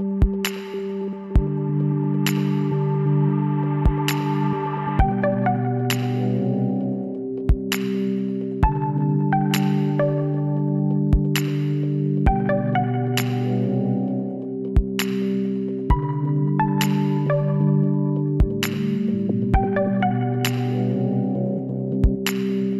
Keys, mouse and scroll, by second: 0.2-3.0 right drag, 2.2 w, 6.1-8.4 middle drag, 8.4-11.7 right drag, 11.7 middle click, 12.1 w, 15.2 ctrl+r, 19.8 ctrl+z, 20.6 ctrl+r.